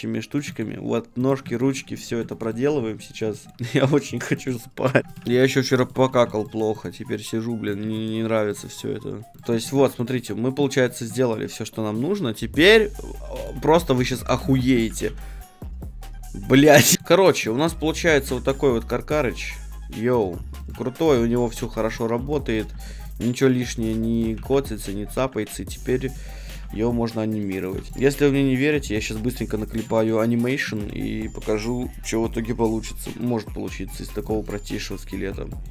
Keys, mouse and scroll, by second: 0.3-2.3 middle drag, 2.3-3.5 drag, 3.5-4.8 middle drag, 4.8 click, 5.0 middle click, 5.0 l, 5.2 right click, 5.3 middle click, 6.2-8.5 drag, 8.5-10.0 middle drag, 9.3 click, 9.3 right click, 9.3 l, 10.0-11.3 drag, 11.1-13.4 middle drag, 12.6-14.6 drag, 14.0 middle click, 14.0 a, 14.2-16.6 right drag, 14.4 ctrl+Tab, 15.0 g, 16.9 ctrl+Tab, 16.9-18.1 drag, 16.9 r, 18.1 right click, 18.3 r, 18.5-19.9 middle drag, 20.3-29.7 right drag, 20.7 g, 21.6 g, 22.7 g, 23.5 g, 24.3 g, 25.2 r, 26.6 r, 27.8 r, 27.9-33.0 middle drag, 33.2-34.2 middle drag, 34.2-35.7 right drag.